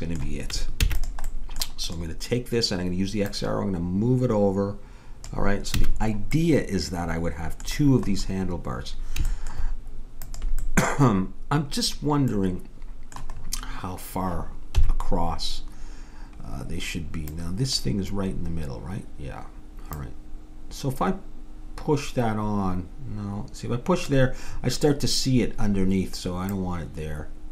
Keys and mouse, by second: 0.8 ctrl+s, 1.9-5.2 drag, 5.8 a, 6.1-9.2 middle drag, 10.2-12.0 drag, 10.2-12.1 middle drag, 14.7 KP_7, 17.3-19.1 drag, 19.9-21.8 drag, 24.5-26.5 middle drag, 26.5-27.5 drag.